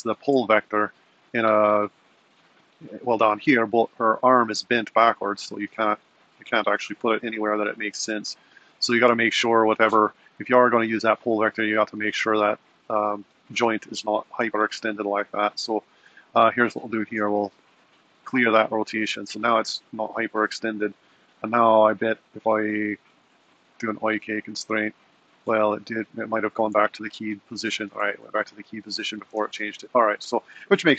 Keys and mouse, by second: 2.2 click, 5.9 g, 12.2 super+z, 12.7 super+z, 16.6 click, 17.3 alt+r, 21.4 click, 26.4 click, 26.9 g, 30.6 super+z.